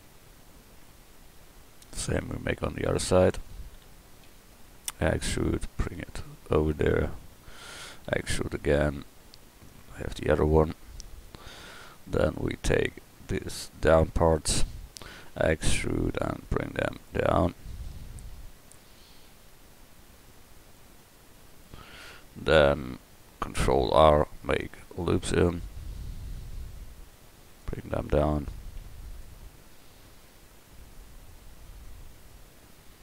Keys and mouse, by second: 2.7-4.2 drag, 4.2 e, 5.1-7.4 drag, 8.1 e, 8.7-11.3 drag, 15.2 e, 17.4-18.4 drag, 23.7 ctrl+r, 28.8 ctrl+r.